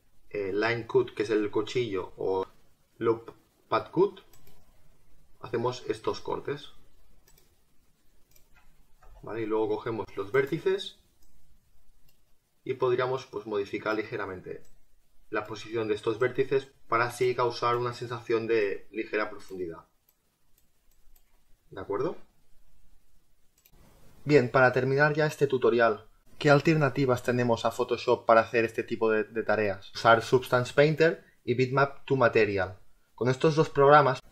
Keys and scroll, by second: 9.0 space.